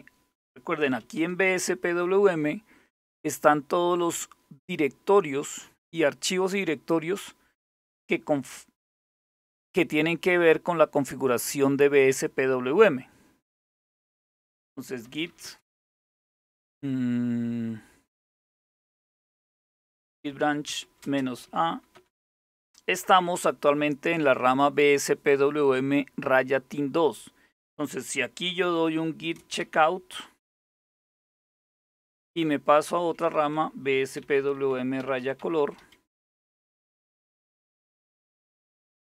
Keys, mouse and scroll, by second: 0.2-1.0 typing, 7.7-11.0 drag, 11.8 click, 13.4 click, 14.5-15.4 typing, 19.1-21.6 typing, 27.9-31.4 typing, 32.4-35.9 typing, 37.3 Return, 37.5 typing, 38.7-39.1 typing.